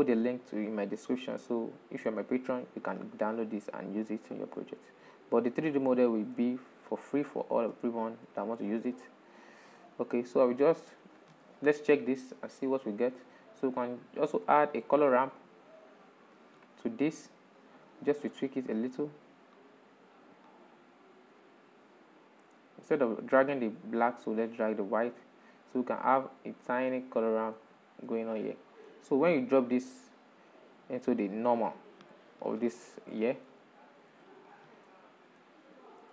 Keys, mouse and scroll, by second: 2.9-4.2 drag, 4.2 scroll down 5, 4.5 click, 5.2 click, 6.1 shift+middle click, 6.9 click, 8.0-8.8 shift+middle drag, 8.8-11.8 drag, 12.4-13.6 drag, 13.6 shift+middle click, 14.5 shift+a, 17.2-18.0 drag, 18.0-18.4 scroll up 5, 19.2-27.9 drag, 27.9-30.5 middle drag, 30.5 drag, 32.4-34.0 shift+middle drag, 34.0 ctrl+shift+click, 34.7-36.1 shift+middle drag.